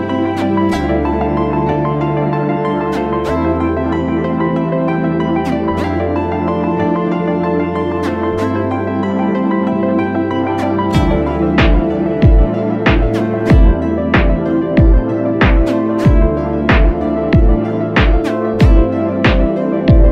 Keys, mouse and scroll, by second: 1.6 double click, 17.1 right click.